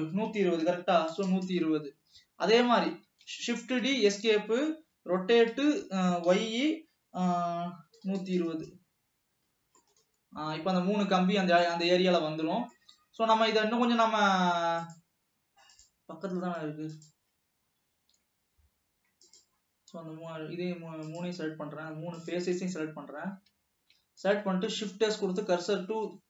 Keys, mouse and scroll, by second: 3.5 shift+d, 5.3 r, 10.0-16.0 middle drag, 18.5 scroll up 2, 19.8 click, 21.3-22.8 shift+drag, 23.0 scroll up 1, 25.2 scroll down 1, 25.5 shift+s.